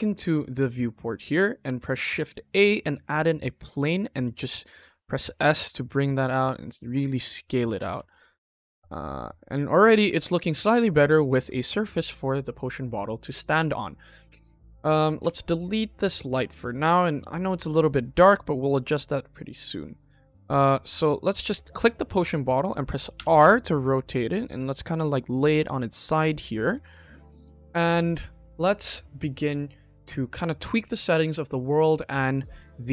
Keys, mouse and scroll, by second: 0.3 click, 1.0 click, 1.3 middle drag, 2.0 shift+a, 3.4 scroll down 2, 4.0 s, 7.5 click, 7.8 KP_1, 8.3-8.8 scroll up 2, 8.7 middle drag, 9.1-9.7 scroll down 3, 9.7 shift+middle drag, 10.2 middle drag, 10.9-11.3 ctrl+middle drag, 11.5 ctrl+middle click, 14.6 click, 15.1 x, 16.9 KP_1, 17.3-17.9 scroll up 2, 17.9 middle click, 18.1 middle click, 18.3-19.9 scroll down 3, 20.7 click, 21.9 KP_1, 23.1 r, 25.5 click, 26.0 middle click, 26.7 ctrl+s, 28.8 middle drag, 30.2-31.3 drag, 31.8 middle click, 32.2 click.